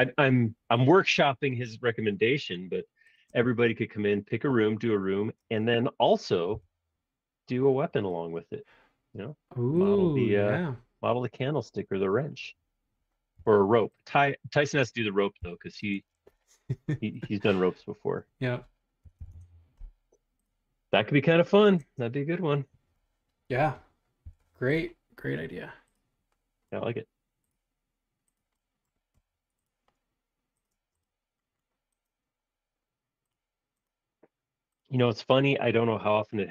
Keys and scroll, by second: 5.3 space, 6.5 m, 7.6 l, 8.3 |, 11.0 Escape, 12.2 space, 13.3 l, 14.9-15.9 typing, 18.8-19.6 typing, 22.3 space, 24.2 l, 30.7 space.